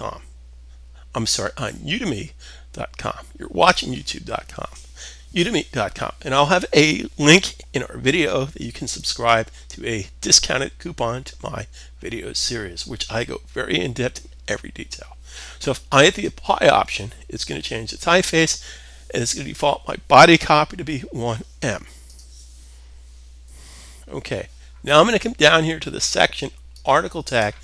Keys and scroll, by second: 23.3 super+s.